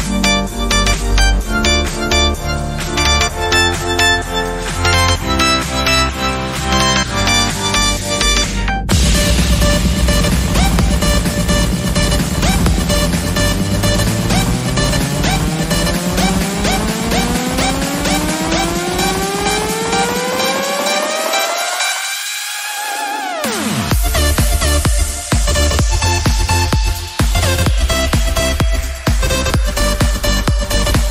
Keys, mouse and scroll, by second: 0.6 r, 2.1 scroll down 2, 2.2-2.7 shift+middle drag, 2.7 shift+d, 3.5 scroll up 3, 3.7 shift+middle click, 4.1 r, 6.7 click, 6.9-7.7 drag, 7.7-8.1 shift+middle drag, 8.1-8.7 scroll down 3, 8.7 shift+d, 9.6 shift+middle click, 9.9-10.4 scroll up 1, 10.4 r, 11.8 scroll down 1, 12.0-12.6 shift+middle drag, 12.6 g, 13.4 shift+d, 14.0-14.6 shift+middle drag, 14.6 g, 15.5 r, 16.4 g, 17.4 scroll down 1, 17.6-18.3 shift+middle drag, 18.3 shift+d, 20.3 r, 20.9 g, 22.0-22.6 shift+middle drag, 22.6 shift+d, 23.7 r, 25.7 g, 26.4 shift+middle click, 27.1 shift+d, 28.1 r, 28.9 g, 30.2-31.1 shift+middle drag.